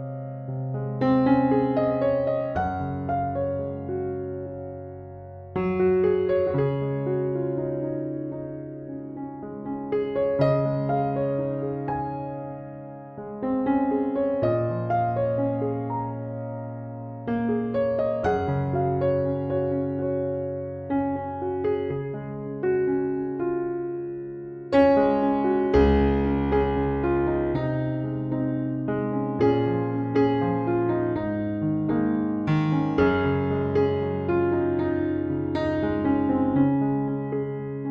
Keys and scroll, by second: 13.6 typing, 35.9-36.7 typing.